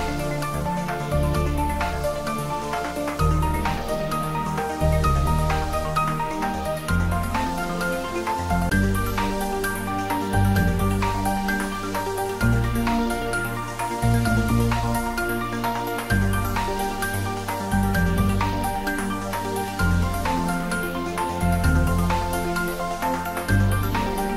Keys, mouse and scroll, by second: 1.3 click, 2.5 s, 2.8 x, 4.5 click, 5.2-5.6 scroll up 1, 5.6-6.5 middle drag, 15.5 Tab, 16.6 click, 17.0 Tab, 17.5-17.9 scroll up 1, 17.9-18.6 middle drag, 19.5 click, 21.5 ctrl+r.